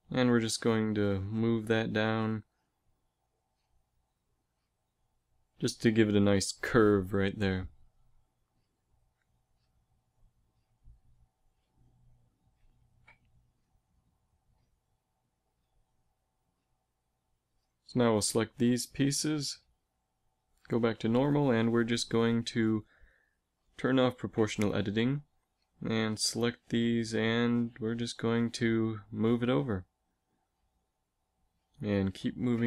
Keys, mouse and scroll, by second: 9.7 z, 10.9 z, 12.9 a, 16.9 z, 17.8 a, 18.1 a, 18.2 b, 20.4 alt+space, 22.6 g, 24.1 o, 25.4 b, 27.0 g, 29.9 a, 30.2 b, 30.9 g.